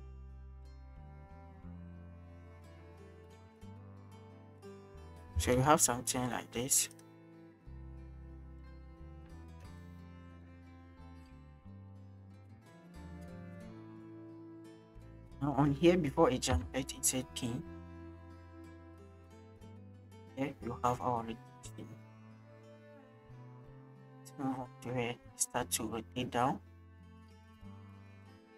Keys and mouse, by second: 0.8 alt+r, 3.1-5.3 drag, 7.0 click, 7.0 space, 9.7 space, 9.8-11.3 drag, 11.7 click, 12.0 click, 16.5 i, 17.5-19.9 drag, 20.8 click, 23.6 click, 24.2-27.2 drag, 27.6 click.